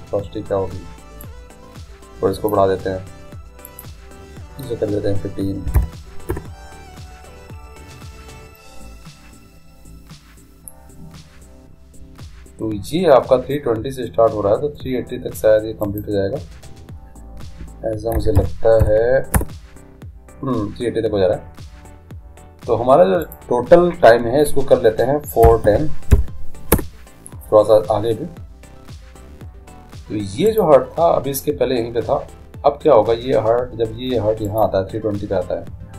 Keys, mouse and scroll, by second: 1.6-3.4 drag, 4.0-5.8 drag, 16.3-18.1 drag, 23.7-25.3 drag, 30.9-32.4 right drag, 34.9-35.9 right drag.